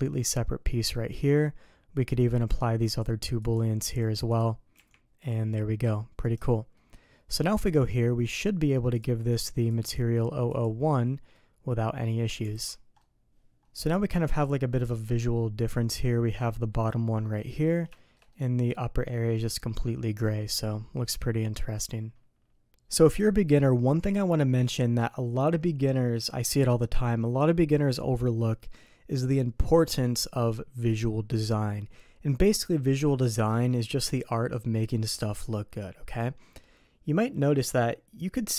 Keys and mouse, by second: 2.9 click, 4.0 click, 4.7 g, 6.7 middle click, 7.6 click, 8.2 click, 9.8 click, 11.3-12.3 middle drag, 12.5 alt+a, 13.0 middle drag, 14.0 middle click, 14.8 shift+middle click, 15.3 middle click, 16.9 middle click, 17.9 shift+middle click, 18.3 middle click, 20.6-22.5 middle drag.